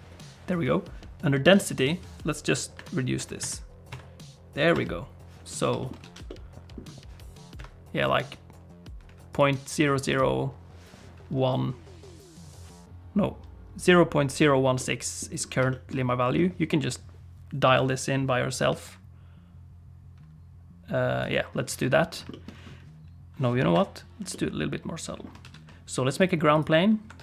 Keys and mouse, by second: 2.8-5.1 drag, 5.8 shift+middle click, 6.0 alt+a, 6.3 middle click, 7.7 click, 9.3 click, 14.8 middle click, 15.7 shift+middle click, 16.3 middle click, 18.8-21.2 shift+drag, 22.3 shift+middle click, 23.7 click, 24.3 middle click, 25.4 shift+a, 27.1 Tab.